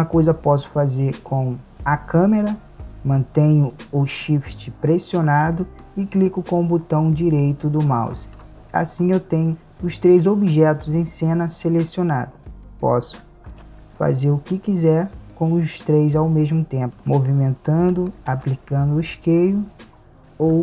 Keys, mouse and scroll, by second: 13.5 g, 18.4 s.